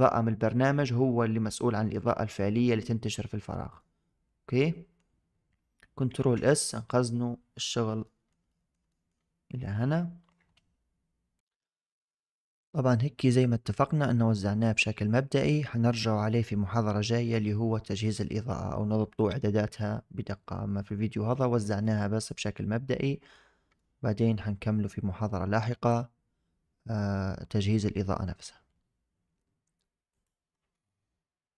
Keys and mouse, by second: 3.7-4.9 middle drag, 6.1 ctrl+s, 7.9 shift+drag, 8.4 middle click, 8.8 shift+drag, 9.7 n, 21.7-23.2 drag, 23.6-24.1 shift+middle drag.